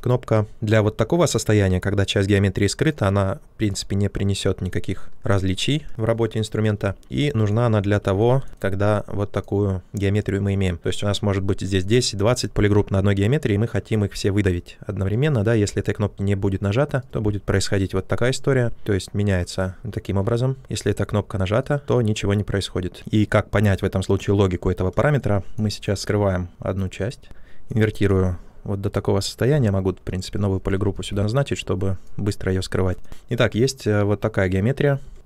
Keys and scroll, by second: 6.7 ctrl+z, 20.5 ctrl+z, 29.4 ctrl+w.